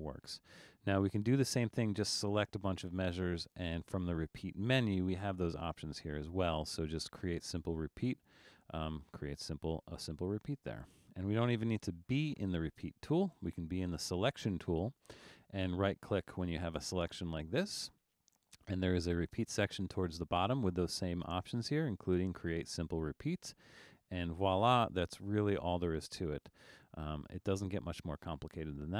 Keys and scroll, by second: 0.5 super+z, 9.8 super+z.